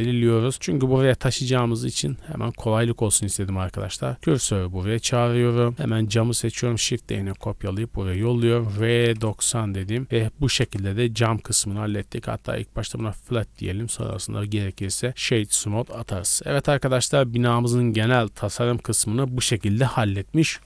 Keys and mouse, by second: 0.5-1.5 shift+drag, 1.5-1.9 middle drag, 1.9 click, 2.0 middle click, 2.2 click, 2.3-3.8 middle drag, 2.4 Tab, 3.4 1, 3.8 click, 3.9 shift+middle click, 4.1 shift+s, 4.5 Tab, 5.0 a, 5.2 a, 6.6 shift+d, 7.2 shift+s, 8.0 r, 9.4 a, 9.6 a, 11.4 KP_0, 11.5-11.9 middle drag, 11.9 w, 13.4-13.9 middle drag, 13.9 click, 14.1-18.8 middle drag, 14.2 w, 15.5 a, 15.7 a, 19.0 middle click.